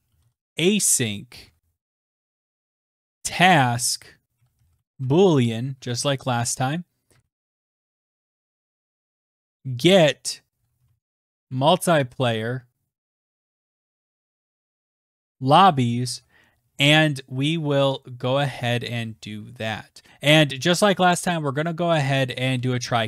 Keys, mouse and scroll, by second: 0.6-14.5 typing, 15.6 Tab, 15.7 Right, 15.7-16.7 typing, 17.6-20.1 scroll, 20.0-23.0 typing.